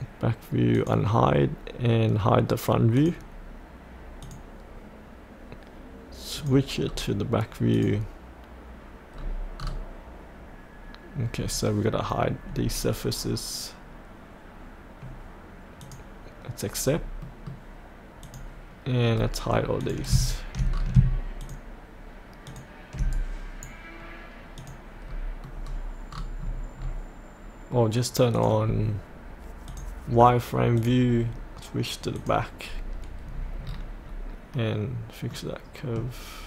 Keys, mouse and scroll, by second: 6.8-7.7 scroll down 1, 7.7 click, 9.1-9.6 scroll down 1, 15.8 click, 16.9-17.2 scroll up 1, 17.2 middle click, 18.2 click, 19.0 scroll down 1, 19.8 click, 20.7 scroll down 1, 21.4 ctrl+click, 22.4 ctrl+click, 23.1 right click, 24.5 click, 25.0 scroll up 1, 26.4-26.8 scroll down 1, 28.3-30.7 drag, 31.1-32.1 scroll down 1, 32.1 click, 35.3 middle click.